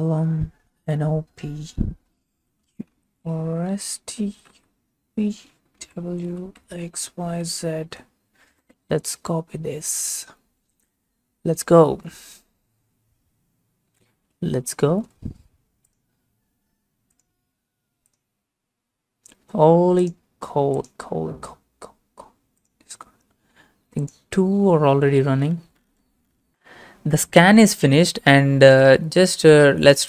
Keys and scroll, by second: 1.9-7.2 typing, 7.5 ctrl+a, 9.0 ctrl+c, 14.4 alt+Tab.